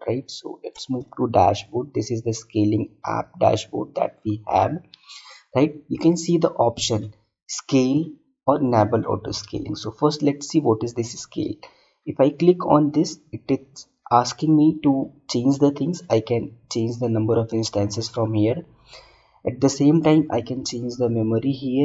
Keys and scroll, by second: 0.1 alt+Tab.